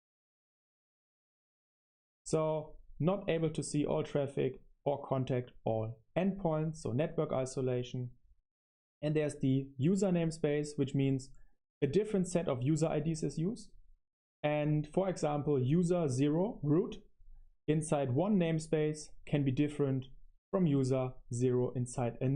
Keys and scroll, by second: 0.0-2.2 typing, 8.3 super+0, 8.8 super+0, 8.9 super+0.